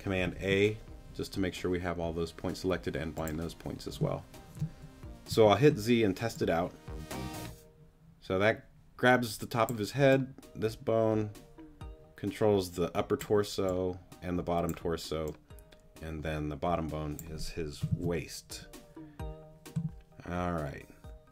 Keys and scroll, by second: 0.4 super+a, 5.3 z, 17.9 super+z.